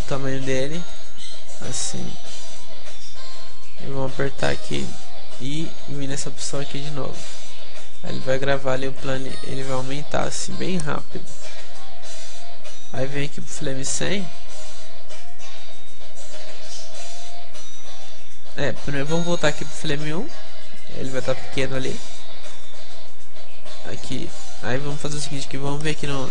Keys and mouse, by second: 0.0 s, 0.1 middle click, 0.1-6.9 drag, 0.5 s, 1.3 s, 9.0-10.7 drag, 18.5-20.5 drag, 18.5 middle click, 22.4 middle click.